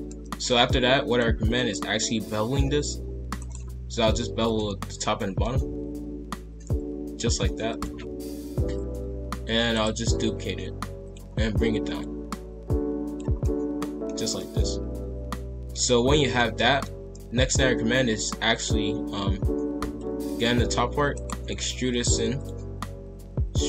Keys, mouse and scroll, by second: 0.0-1.0 middle drag, 1.0 alt+click, 1.7 middle click, 2.4 ctrl+b, 4.4 alt+shift+click, 5.1 middle click, 5.7 ctrl+b, 8.4 ctrl+l, 8.9 KP_5, 9.5 shift+d, 11.0 click, 13.4 middle click, 14.1 scroll down 1, 14.3-15.9 middle drag, 15.9-16.3 scroll up 1, 16.3-19.7 middle drag, 19.7 alt+click, 21.0 e, 21.4 s.